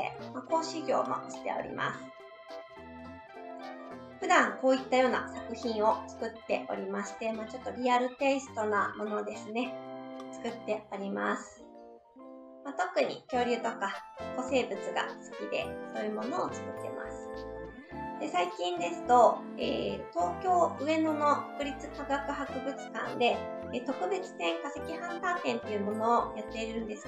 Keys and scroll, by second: 3.0 Right, 17.2 Right.